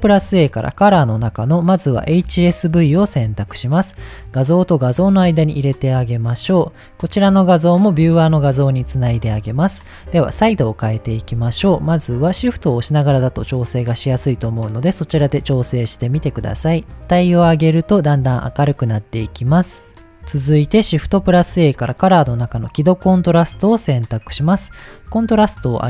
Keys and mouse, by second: 6.1 click, 7.2-8.3 drag, 11.7-20.0 shift+drag, 20.8 shift+a, 25.0 click, 25.7-25.8 drag.